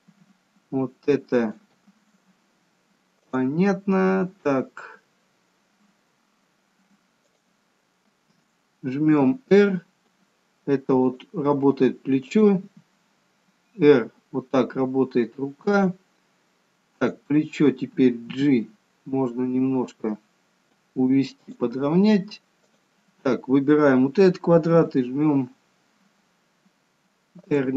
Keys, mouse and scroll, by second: 0.1 click, 0.6 g, 3.5 click, 4.1 a, 7.6 click, 9.4 r, 12.5 click, 12.9 r, 17.3 click, 18.9 g, 22.9 click, 25.1 r.